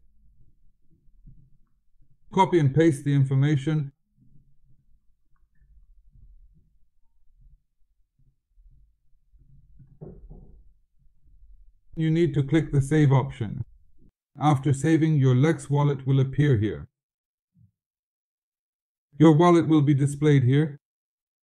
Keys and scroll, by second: 1.2 ctrl+v, 4.2 ctrl+c, 9.7 ctrl+v.